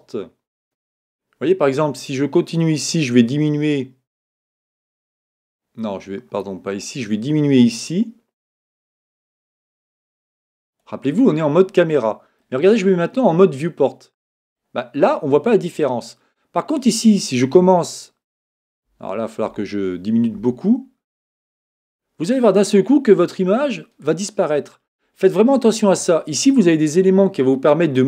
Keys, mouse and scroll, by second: 2.6-4.5 drag, 7.1-9.0 drag, 12.4-14.8 middle drag, 17.4-19.2 drag.